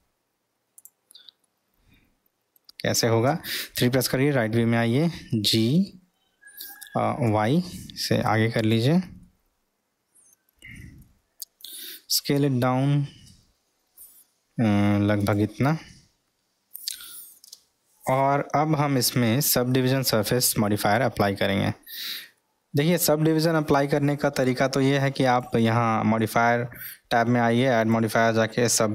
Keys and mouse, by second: 1.4-2.6 middle drag, 5.3 g, 9.2-11.1 middle drag, 11.8 s, 15.9-17.3 middle drag, 25.2 click.